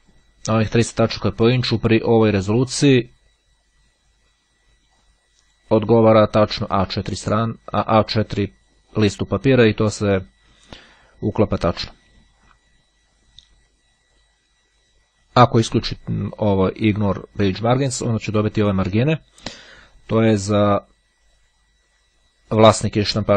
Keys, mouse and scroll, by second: 2.7 click, 5.1 click, 8.7 click, 17.7 click.